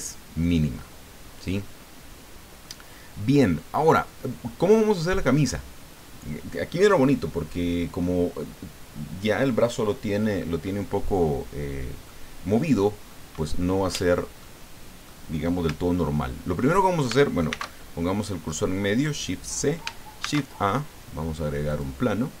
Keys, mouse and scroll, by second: 0.3-1.7 middle drag, 2.2 middle click, 2.9-3.2 scroll up 1, 3.3 scroll down 1, 4.0 scroll down 1, 4.4-6.3 middle drag, 7.2 scroll down 1, 11.2-12.2 middle drag, 13.1 middle click, 14.4 middle click, 17.5 shift+c, 18.6-19.1 scroll up 2, 20.2 shift+a, 21.7 click.